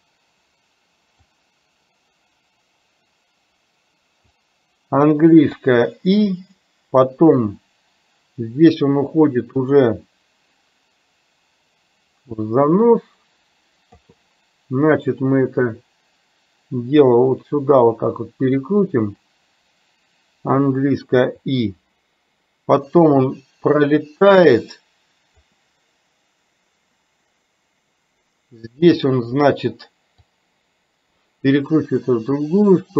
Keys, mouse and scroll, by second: 1.5-4.5 drag, 5.7 i, 7.6-14.1 drag, 15.4-18.9 drag, 21.4 i, 23.2-25.5 drag, 30.2-32.9 drag.